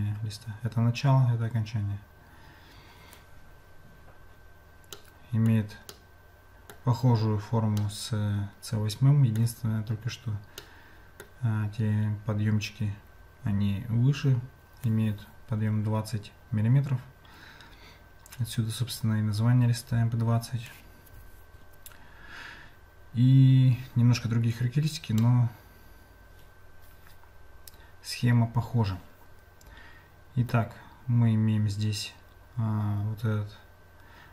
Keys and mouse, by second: 5.1 middle click, 6.1 middle click, 8.0-9.4 middle drag, 10.8 middle click, 25.1-30.5 middle drag.